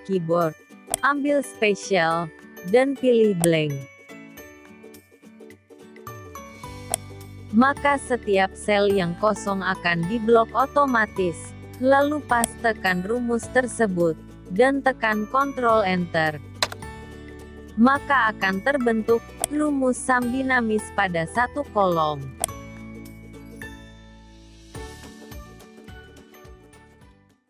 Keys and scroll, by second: 12.9 ctrl+v, 15.8 ctrl+Return.